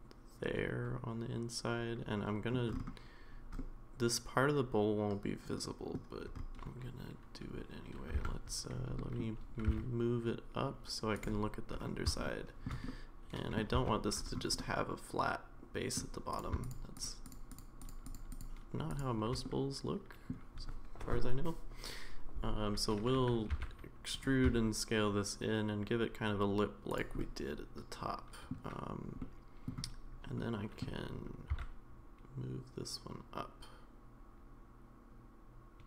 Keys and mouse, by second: 3.6-5.9 middle drag, 8.1 Tab, 9.0 middle drag, 9.6 g, 12.2 shift+middle click, 12.9 middle click, 13.7 Tab, 14.6-16.0 middle drag, 16.7 shift+click, 17.2 shift+click, 17.5 shift+click, 17.8 shift+click, 18.0 shift+click, 18.3 shift+click, 19.4 middle click, 23.5 e, 24.5 s, 27.2-28.5 middle drag, 29.2 middle click, 30.4 middle click, 31.5 e.